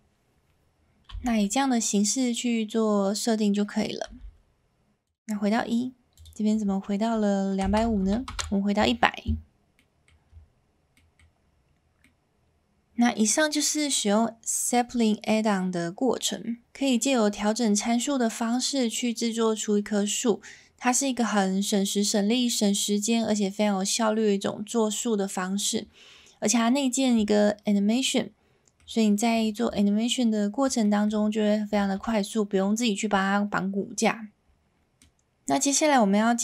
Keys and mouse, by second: 1.1 space, 4.1 space, 6.3-8.8 drag, 8.0 KP_0, 9.8 middle click, 11.0 middle click, 12.0-12.9 middle drag, 27.9-28.7 middle drag, 29.4 shift+middle click, 29.7-31.0 middle drag, 31.7 shift+middle click, 32.0-32.6 middle drag, 34.9-35.3 middle drag.